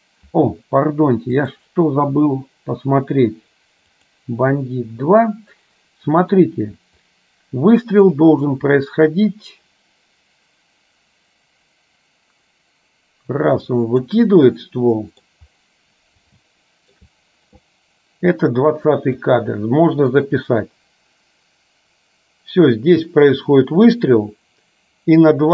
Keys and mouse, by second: 1.5-4.7 drag, 6.5 click, 7.2-14.3 drag, 14.7 middle click, 16.6 shift+middle click, 19.5-25.5 drag.